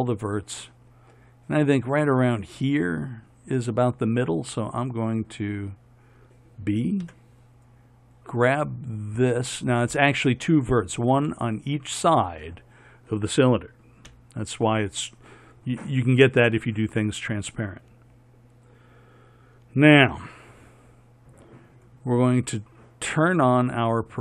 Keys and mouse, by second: 7.3 b, 14.3 KP_1.